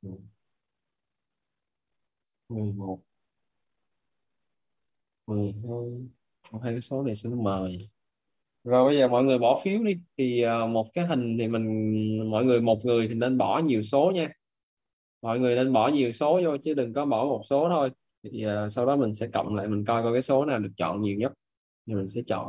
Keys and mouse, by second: 0.6 click, 1.6 ctrl+n, 2.3 1, 3.1 click, 4.5 ctrl+n, 4.7-5.7 typing, 5.8 click, 7.5 middle click, 17.9 middle click.